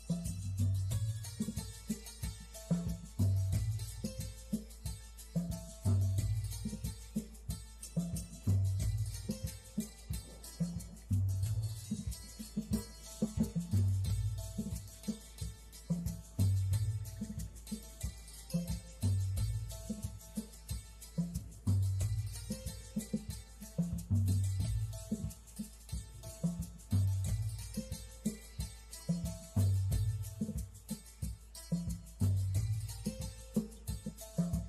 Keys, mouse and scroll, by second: 0.6 click, 3.9-4.3 shift+scroll down 2, 5.7 click, 15.2 click, 25.1 shift+middle click, 27.3 middle click, 27.7 click, 28.5 click, 31.3 click, 31.9 click, 32.4 click, 33.7 click.